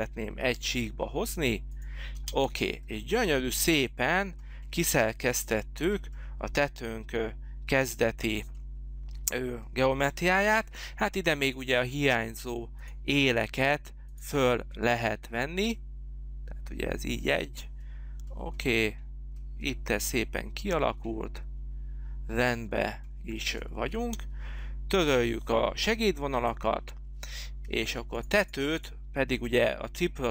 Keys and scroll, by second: 0.0 p, 2.2 space, 3.6 space, 23.9 space.